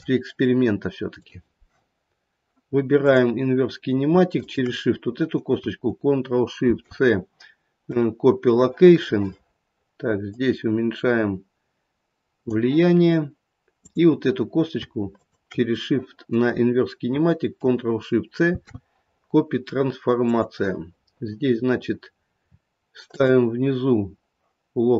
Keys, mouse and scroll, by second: 1.1 click, 2.0-2.7 scroll up 1, 3.0 click, 4.3 shift+click, 6.6 ctrl+shift+c, 10.2 click, 13.8 click, 15.1 shift+click, 18.5 ctrl+shift+c, 21.4-22.0 scroll down 2, 22.0-23.0 scroll down 5, 23.0 click.